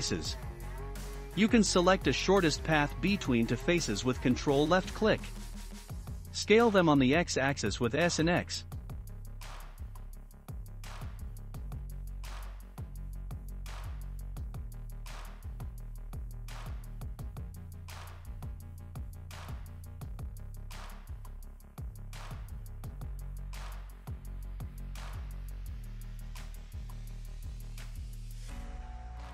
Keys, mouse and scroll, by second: 0.0 click, 0.8-2.9 shift+middle drag, 2.9 ctrl+click, 3.7-4.2 scroll down 2, 4.2-6.6 shift+middle drag, 5.4 scroll up 1, 6.6 s, 12.0-12.3 scroll down 1, 12.6-14.2 shift+middle drag, 14.2 scroll down 1, 14.8 Tab, 15.1 click, 16.1 scroll down 2, 16.7-18.1 shift+middle drag, 18.1 click, 19.0 scroll, 19.0-19.4 scroll up 2, 19.4-21.7 middle drag, 21.7 click, 22.3-23.4 middle drag, 22.8 scroll up 1, 23.4 ctrl+r, 26.4 shift+scroll up 1, 26.6 shift+middle click, 27.5 scroll up 2, 28.1 ctrl+r.